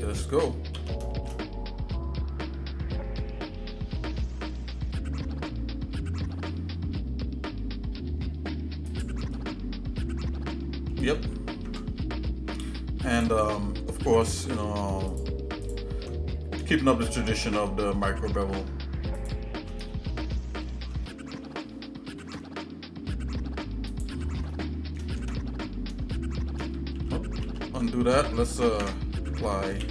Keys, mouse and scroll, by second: 0.7 s, 9.3-10.9 shift+middle drag, 11.5 ctrl+Tab, 14.3 click, 15.1 alt+shift+click, 15.8 click, 16.7 shift+middle click, 19.1 alt+shift+click, 19.9 shift+middle click, 22.0 ctrl+b, 24.5 shift+middle click, 25.2 Tab, 26.1 shift+middle click, 27.0 ctrl+z, 27.4 ctrl+z, 28.8 Tab, 29.8 ctrl+a.